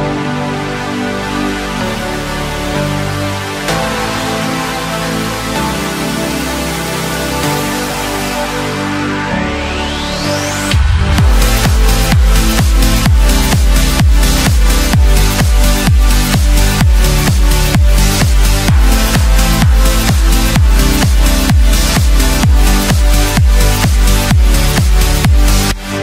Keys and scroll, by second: 3.8 ctrl+shift+x, 19.7 ctrl+space.